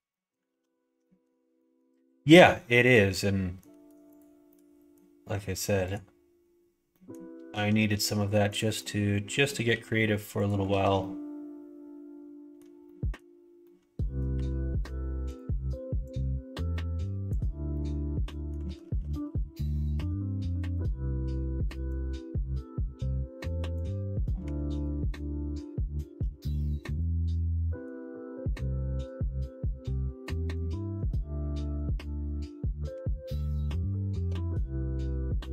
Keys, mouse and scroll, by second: 0.0 middle click, 0.4 ctrl+z, 1.0 middle click, 1.5 middle click, 2.2 middle click, 2.8 click, 3.1 middle click, 4.0 shift+click, 4.4 shift+middle click, 6.8 middle click, 7.5 s, 8.7 middle click, 9.7 g, 10.6 ctrl+z, 10.9-12.5 middle drag, 12.8 middle click, 13.6 middle click, 14.3 g, 16.0-17.3 drag, 17.7 middle click, 18.6 ctrl+z, 18.8 ctrl+z, 18.9 ctrl+z, 19.1 ctrl+z, 19.2 ctrl+z, 19.6 ctrl+z, 20.6 click, 21.9-24.4 drag, 24.4 1, 24.7 click, 26.2 g, 27.6 scroll up 1, 27.7 middle click, 27.8 scroll down 1, 29.1 click, 30.3 middle click, 30.5 scroll down 1, 31.3 scroll up 1, 31.3 middle click, 32.0 middle click, 32.9 2, 33.4 click, 34.1 shift+click, 34.9 f, 35.1 middle click.